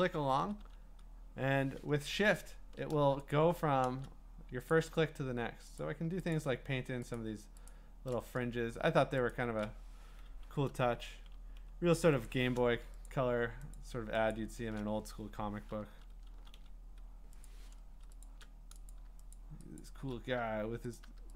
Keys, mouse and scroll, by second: 2.4 shift+click, 3.3 alt+click, 5.8 alt+click, 6.3 alt+click, 7.2 alt+click, 7.7 alt+click, 9.3 click, 12.1 click, 12.3 click, 13.1 shift+click, 13.8 click, 14.3 shift+click, 18.2 shift+click, 18.9 click, 19.3 shift+click, 19.8 shift+click.